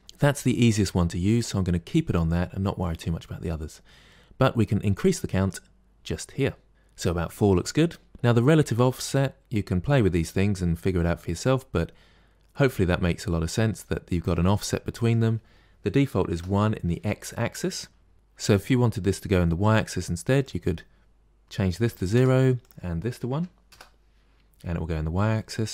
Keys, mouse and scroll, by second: 4.8-5.8 drag, 6.2-6.7 scroll down 2, 8.8-11.8 drag, 14.8-17.8 drag, 20.3-24.4 drag, 24.4-25.2 scroll down 1, 25.2 middle click.